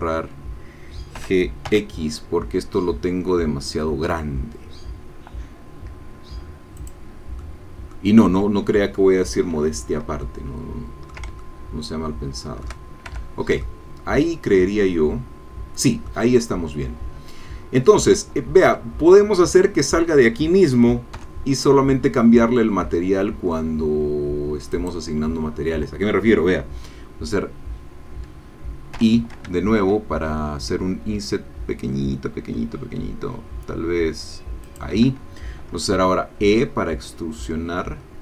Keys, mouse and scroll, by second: 1.2 g, 1.7 x, 6.8-8.1 drag, 8.4 scroll down 1, 10.2-11.3 ctrl+drag, 11.4-12.8 ctrl+shift+drag, 13.1 shift+Tab, 13.6 shift+click, 13.7-18.2 shift+middle drag, 18.9 Tab, 21.2 3, 24.7 click, 29.1 i, 34.8 shift+click, 35.9 e.